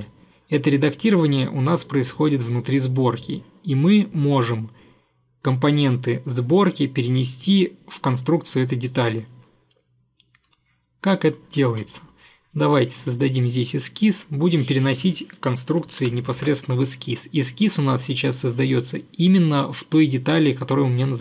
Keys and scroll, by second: 16.1 ctrl+8.